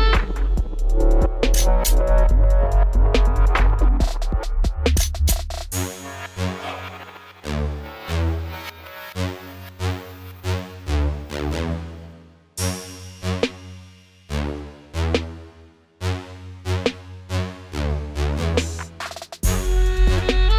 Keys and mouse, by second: 0.4 a, 0.5 b, 1.1 w, 1.7 w, 3.4 a, 3.7 b, 4.7 w, 5.2 w, 6.8 a, 7.1 b, 7.8 w, 8.3 w, 9.8 a, 10.0 b, 10.6 w, 11.0 w, 13.2 a, 13.4 b, 14.0 w, 14.8 w, 15.6-17.4 drag, 16.7 w, 18.9 click, 19.5 w.